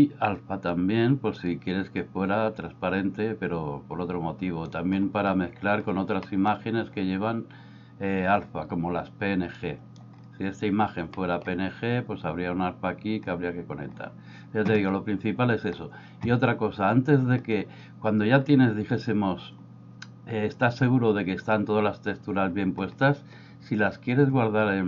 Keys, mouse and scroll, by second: 1.4-4.7 drag, 6.4 middle drag, 9.7 click, 11.3 middle click.